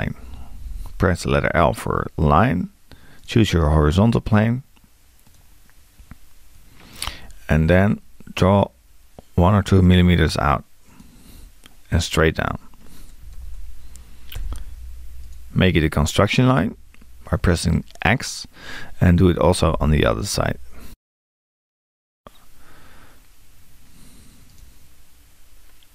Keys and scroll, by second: 0.2 l, 13.2 2, 19.2 l.